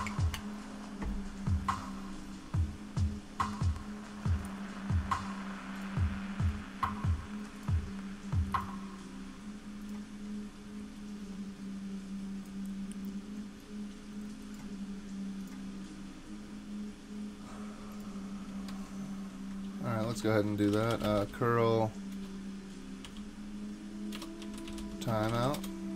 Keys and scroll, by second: 18.7 super+Tab, 20.1 super+t, 20.4-25.9 typing.